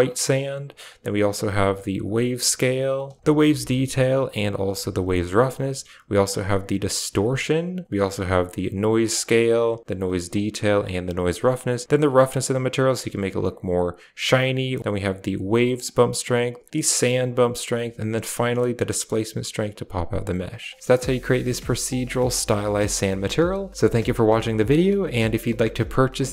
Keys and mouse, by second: 0.8-2.9 drag, 3.2 click, 4.4 click, 5.4-9.1 drag, 9.4 click, 10.2 click, 11.5-15.7 drag, 16.1-17.1 drag, 17.6-26.2 shift+drag.